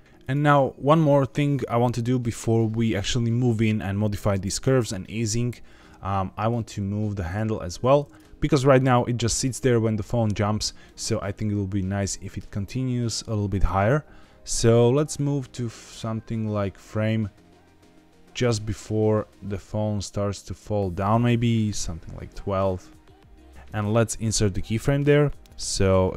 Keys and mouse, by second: 7.2 click, 8.9-10.6 drag, 14.4-23.5 drag, 24.6 click.